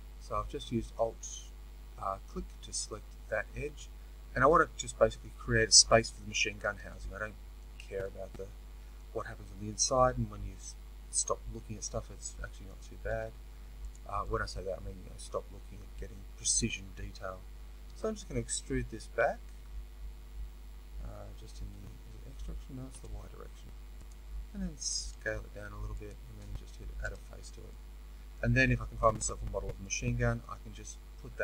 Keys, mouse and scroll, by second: 13.8 z, 17.8 e, 24.0 click, 25.2 s, 25.8-27.0 middle drag, 27.0 f, 27.6-31.4 middle drag.